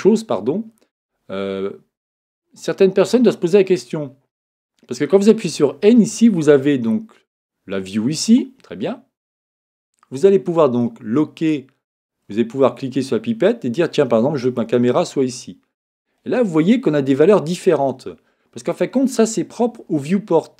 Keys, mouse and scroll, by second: 1.3-5.4 middle drag, 5.7-7.8 middle drag, 12.6-14.4 drag.